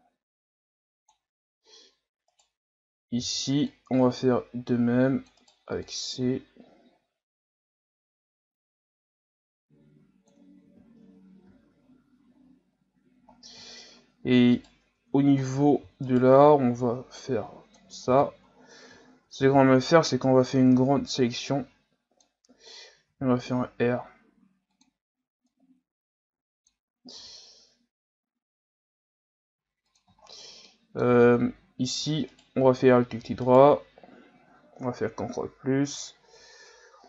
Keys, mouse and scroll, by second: 2.3 right click, 3.2 c, 5.8-8.9 drag, 10.7 z, 11.0 Tab, 11.4 a, 11.8-13.2 scroll down 9, 13.2-13.6 scroll up 4, 13.6 scroll down 6, 13.9-14.5 scroll up 1, 14.5 right click, 14.9 Tab, 15.4 scroll down 2, 16.1 alt+right click, 17.2 click, 18.1 ctrl+z, 18.5-19.4 scroll down 3, 19.4 z, 20.8 b, 23.1 r, 25.5-27.1 drag, 27.1 r, 30.2-30.7 scroll up 4, 30.7 middle click, 31.1-32.3 scroll up 1, 32.3 alt+right click, 33.4 alt+right click, 34.9 ctrl+KP_Add, 35.2 ctrl+KP_Add, 36.6 KP_3.